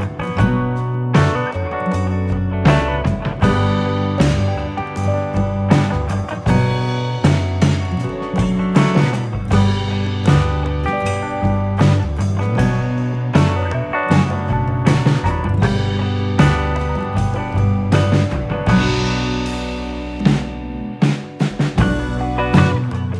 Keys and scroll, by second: 16.2 F10, 16.6 F9.